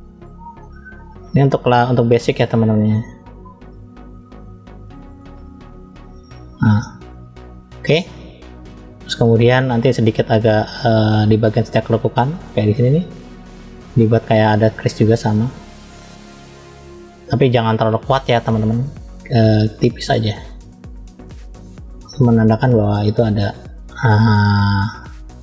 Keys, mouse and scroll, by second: 0.0-0.4 scroll up 2, 0.6 shift+middle click, 2.1 click, 3.7 click, 6.7-8.0 scroll down 3, 8.4-9.6 shift+middle drag, 10.8-12.1 middle drag, 15.6 click, 18.3-19.0 drag, 19.5-20.9 drag, 21.4 middle click, 22.4 click, 24.0 middle click, 25.2 click.